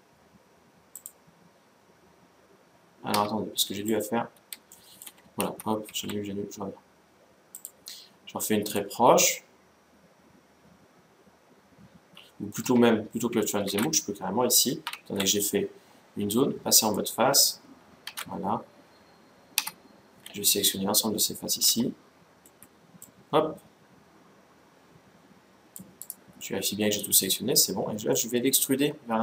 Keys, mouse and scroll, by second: 3.2 scroll up 1, 3.4-6.3 middle drag, 5.2 ctrl+z, 5.6 ctrl+z, 7.3-9.3 drag, 13.4 ctrl+z, 14.7 ctrl+Tab, 17.8 ctrl+Tab, 19.3 z, 20.0-21.9 middle drag, 21.4 c, 25.8-27.5 right drag, 26.2-27.7 middle drag, 27.9-29.2 middle drag, 28.5 e.